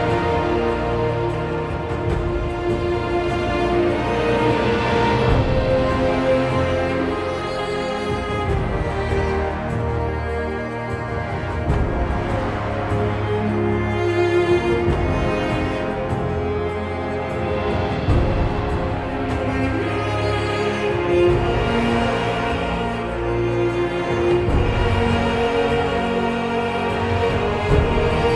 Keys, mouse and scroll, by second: 4.7-5.0 typing, 7.9 typing, 8.0 ctrl+z, 9.1 ctrl+z, 10.3 ctrl+z, 11.1 ctrl+z, 12.9 ctrl+z, 13.6 ctrl+z, 14.5 ctrl+z, 18.4 e, 20.2 e, 20.2 ctrl+z, 22.1 b, 23.8 b, 24.0 ctrl+z, 25.3 ctrl+z, 26.5 ctrl+z, 27.4 ctrl+z.